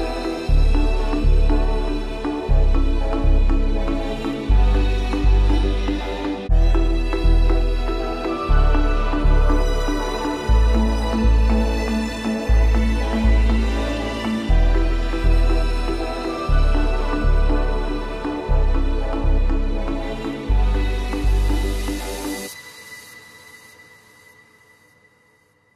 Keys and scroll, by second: 0.5 ctrl+g, 3.6 ctrl+z, 13.6 ctrl+0, 14.0 ctrl+-.